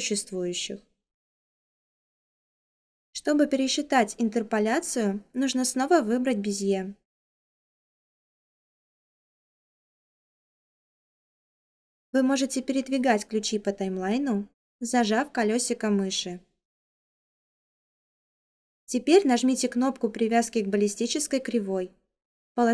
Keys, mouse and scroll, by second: 14.7-22.7 middle drag.